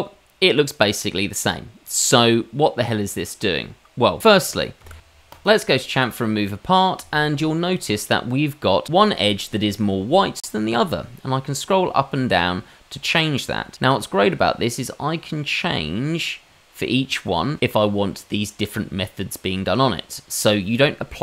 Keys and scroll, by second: 5.0 y.